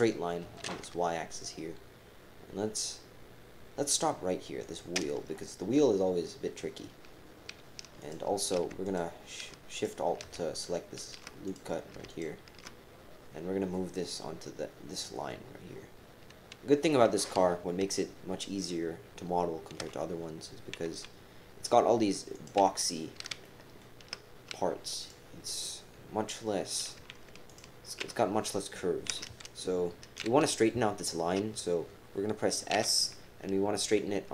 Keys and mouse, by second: 0.4 g, 5.3 right click, 8.0 click, 8.5-10.3 typing, 8.8 alt+shift+click, 9.7 click, 10.5 alt+shift+click, 11.4 click, 12.1 alt+shift+click, 19.8 g, 23.4 shift+middle click, 23.5 shift+click, 23.8 shift+middle click, 25.0 click, 27.5 alt+shift+click, 32.7 s.